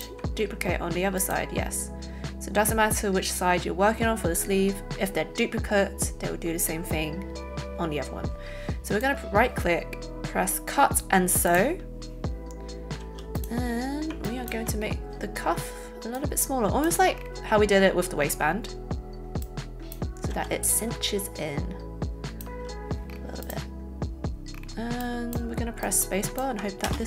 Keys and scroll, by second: 13.0 a, 20.8 shift+a, 26.8 alt+space.